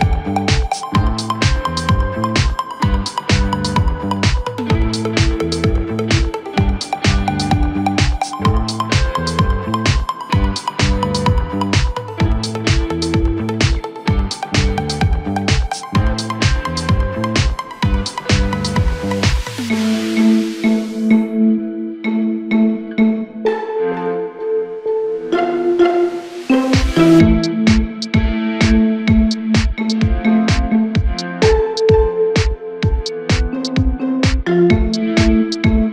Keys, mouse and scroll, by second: 0.3-1.4 scroll up 1, 1.4-2.2 scroll down 4, 2.2-3.7 shift+middle drag, 3.7-4.1 scroll up 1, 4.1 Tab, 5.4 3, 5.8 click, 7.1 i, 8.8 Tab, 9.4 scroll down 2, 9.6-10.5 middle drag, 10.5 KP_1, 11.3-12.1 shift+middle drag, 12.1-13.2 scroll up 6, 13.6 Tab, 14.8 Tab, 15.1-15.6 scroll down 5, 16.2-17.1 shift+middle drag, 17.1-18.0 scroll up 1, 18.0-19.2 drag, 19.2 scroll up 2, 19.5 Tab, 20.8 2, 23.0 click, 23.2 click, 23.8-26.1 right drag, 26.1 3, 26.6 click, 27.3-28.9 scroll up 2, 32.9 click, 34.3-35.9 drag.